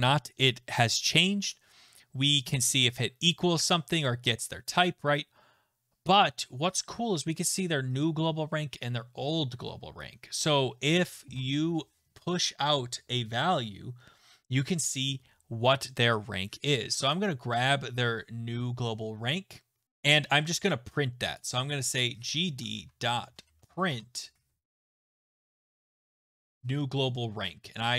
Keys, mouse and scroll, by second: 17.1 click, 21.4 click, 22.0-26.8 typing, 25.6 click, 27.7 click.